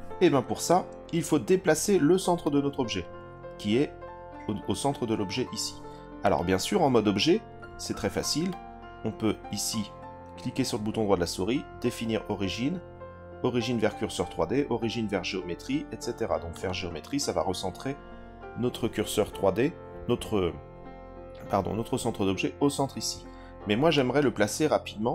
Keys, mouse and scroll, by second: 0.7-1.7 drag, 2.4 click, 6.2 click, 8.5-16.6 right drag, 23.9-25.0 drag.